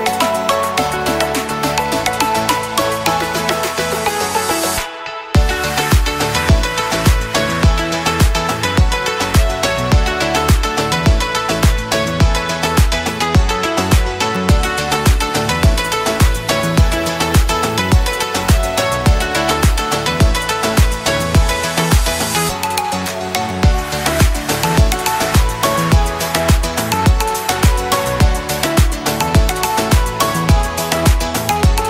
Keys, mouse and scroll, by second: 16.8-21.6 drag, 21.6 alt+scroll up 1, 21.9 space, 22.1 click, 22.5 space, 22.9-25.4 drag, 31.3 click.